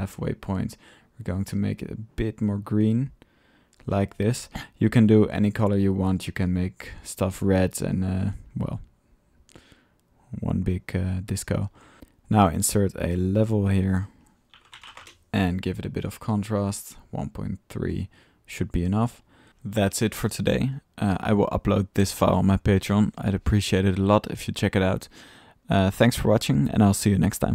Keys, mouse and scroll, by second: 2.7-4.3 drag, 6.8-9.6 drag, 10.9 drag, 11.7 ctrl+click, 11.7-12.5 typing, 12.2 drag, 13.6 click, 14.8 typing, 14.9 Return, 16.5-18.1 middle drag, 18.6 click, 19.2-20.0 typing, 19.3 click, 19.4 middle click, 21.2-22.1 drag, 22.1 right drag, 22.5 click, 22.9-25.0 drag, 26.4-27.1 drag.